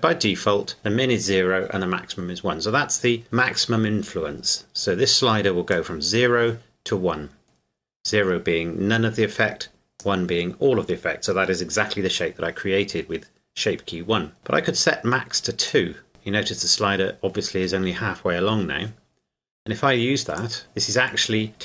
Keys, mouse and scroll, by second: 5.7 click, 15.6 click, 16.1 KP_Enter, 20.4 click.